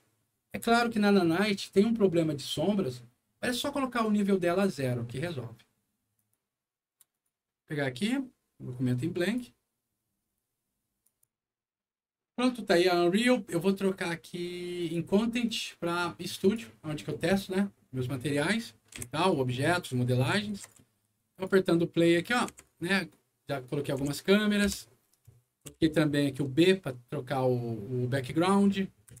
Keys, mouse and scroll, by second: 6.1 click, 7.0 click, 9.2 click, 11.0 click, 14.7 click, 15.4 click, 16.1 click, 16.3 click, 18.2 middle click, 18.9-20.8 typing, 19.2-20.6 right drag, 21.2 click, 22.0 click, 22.4 c, 25.7 b, 29.0-29.2 typing.